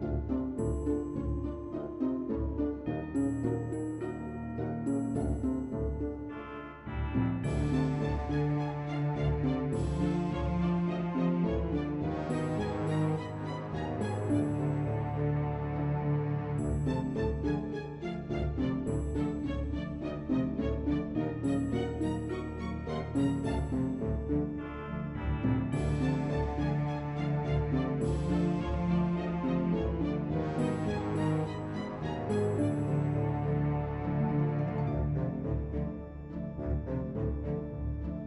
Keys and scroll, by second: 9.5-11.8 typing, 15.5-18.1 typing, 21.9-24.1 typing, 25.2 typing, 26.7 ctrl+w, 30.8-32.1 typing.